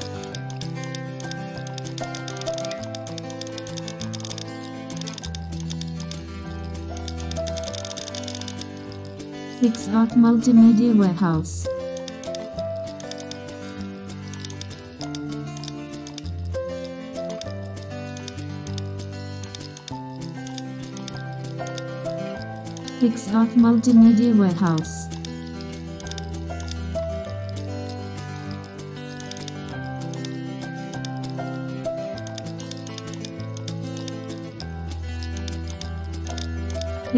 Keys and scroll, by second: 6.5 super+0, 30.3 super+e, 31.9 super+t.